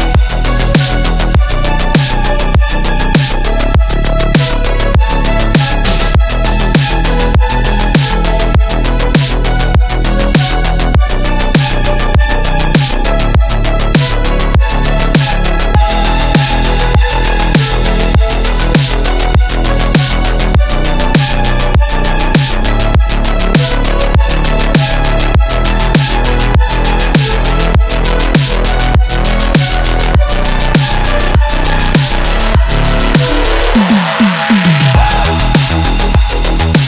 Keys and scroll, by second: 0.4 KP_3, 2.2-3.0 typing, 3.6 ctrl+KP_1, 6.1 KP_3, 7.8-8.8 typing, 9.6 ctrl+KP_1, 9.9 KP_3, 11.3 KP_3, 11.5 KP_1, 14.4 KP_3, 16.1-18.0 typing, 16.2 Return, 21.1-21.9 typing, 23.9 ctrl+KP_1, 24.6 ctrl+KP_1, 24.9 KP_3, 26.9 KP_3, 34.3 KP_1, 34.9 w, 36.4 g.